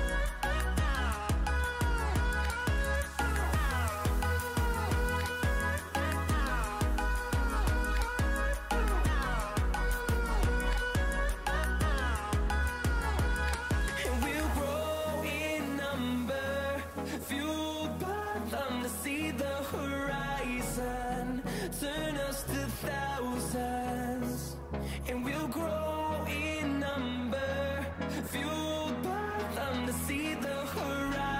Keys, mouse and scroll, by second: 13.1 Down, 20.2 click, 20.2 typing, 22.8 click.